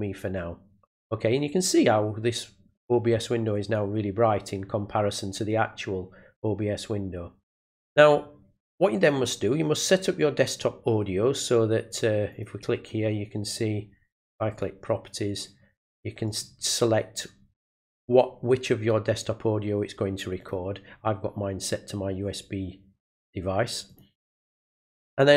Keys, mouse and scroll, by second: 12.3 click, 14.5 click, 16.2 click, 20.4 click, 23.9 click.